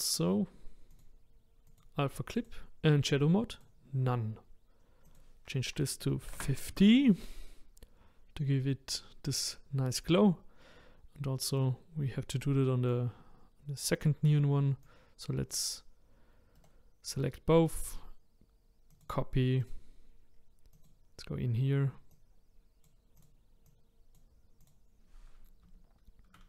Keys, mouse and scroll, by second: 3.6-26.4 drag.